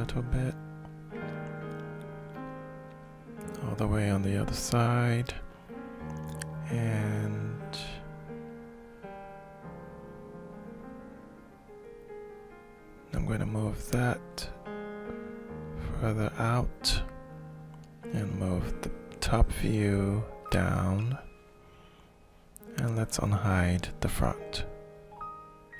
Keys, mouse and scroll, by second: 0.3-10.1 shift+drag, 12.2 shift+click, 14.3-16.9 middle drag, 17.5 click, 18.9-21.7 drag, 23.7-25.1 drag.